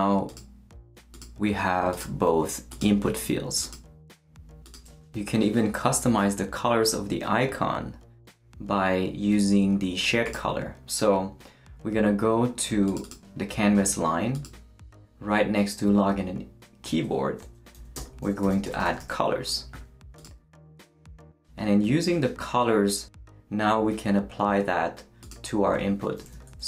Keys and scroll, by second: 17.7-19.5 typing, 26.2-26.6 typing.